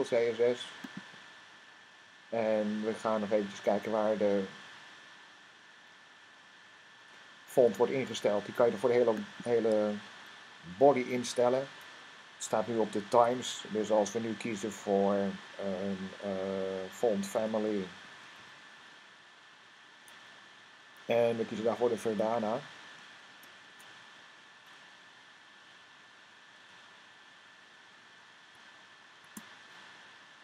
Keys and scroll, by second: 17.2-19.1 typing, 21.8 Down, 30.2 Down.